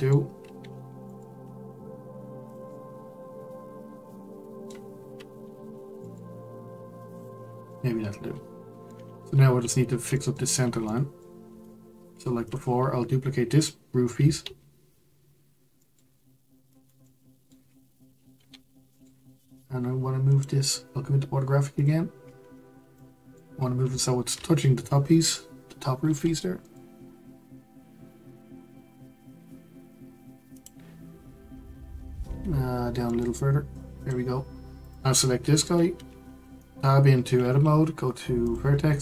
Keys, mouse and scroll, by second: 0.6 g, 2.7-5.5 middle drag, 5.5 g, 7.4 scroll down 2, 7.7-10.4 middle drag, 10.4-10.8 scroll up 2, 10.8 middle click, 11.4 Tab, 12.4 click, 14.4 shift+d, 17.0-18.3 middle drag, 18.3 g, 21.7 click, 22.2-22.9 scroll up 4, 22.9-23.5 shift+middle drag, 23.5-24.0 scroll up 4, 24.0-24.4 shift+middle drag, 24.4-25.3 scroll up 3, 25.3-26.0 scroll up 1, 26.0 g, 32.2 g, 34.8 click, 36.2 Tab, 38.4-39.0 drag.